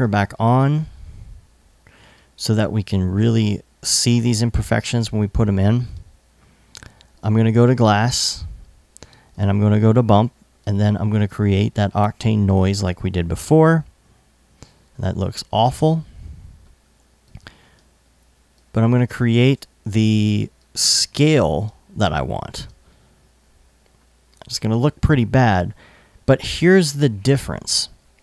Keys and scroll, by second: 4.1 i, 22.2 super+s.